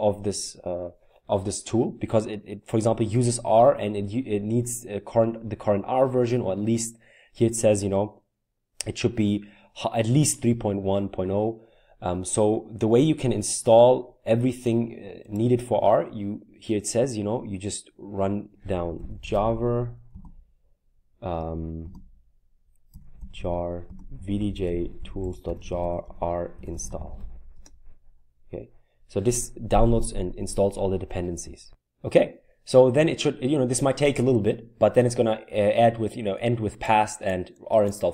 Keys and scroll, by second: 18.7-19.8 typing, 22.7-27.6 typing.